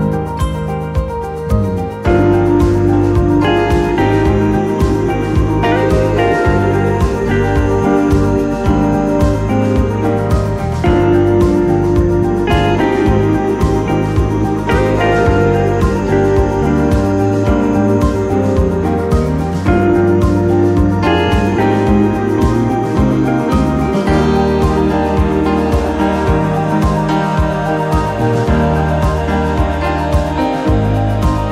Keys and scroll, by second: 2.6-3.5 typing, 8.5 m, 11.7 3, 12.1 Return, 13.9 r, 17.4 t, 21.4-24.1 typing, 27.1 p.